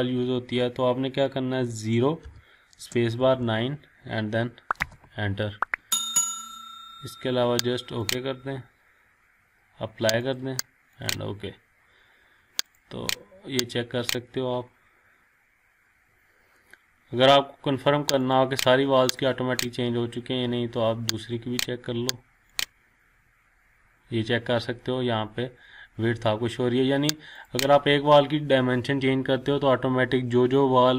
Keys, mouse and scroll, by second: 8.3 click, 27.9 click.